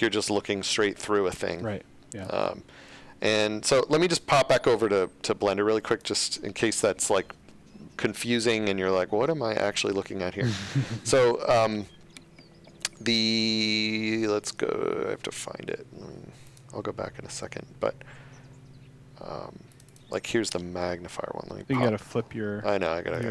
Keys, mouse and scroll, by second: 0.0 shift+a, 1.2-1.9 typing, 5.9 click, 8.1 click, 19.7 click.